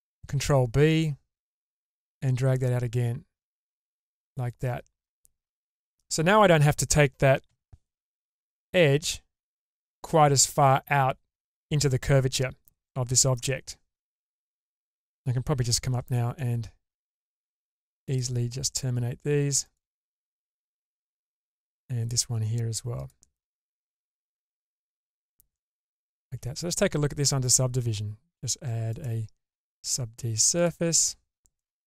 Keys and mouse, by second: 0.3 ctrl+b, 5.0 middle click, 7.5 k, 12.6 middle click, 14.3 middle click, 15.6 k, 21.2-25.0 middle drag, 25.5 middle click, 26.3 Tab, 28.9-31.5 drag, 31.5 middle click.